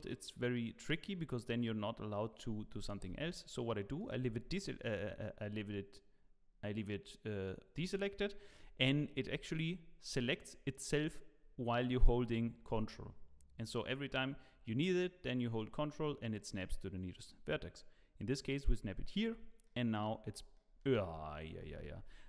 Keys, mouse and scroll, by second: 4.0 click, 9.3 g, 19.2 scroll down 2.